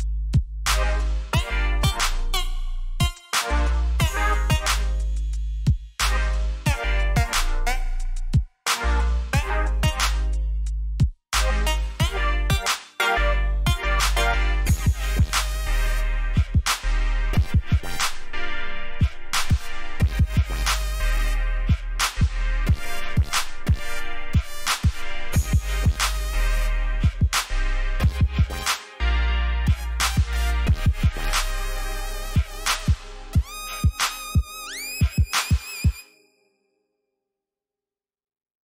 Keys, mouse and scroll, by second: 1.7 click, 5.5 ctrl+z, 6.4 click, 11.8 ctrl+z, 12.8 click, 14.2 alt+scroll down 1, 14.7 v, 15.4 click, 17.4 alt+click, 19.7 click, 21.2 ctrl+z, 21.8 click, 23.0 shift+click, 24.6 alt+click, 29.3 Up, 29.9 ctrl+t, 30.6 right click, 31.8 click.